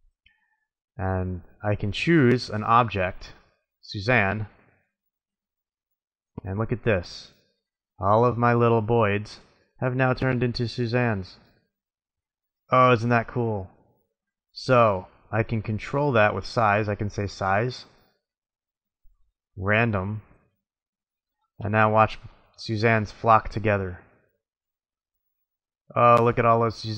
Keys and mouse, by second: 1.1-7.1 drag, 7.1 middle click, 11.6-12.2 middle drag, 13.8-14.6 middle drag, 17.5-19.4 drag, 19.7-21.4 drag, 22.4-24.8 drag, 26.3 middle click, 26.4 middle click.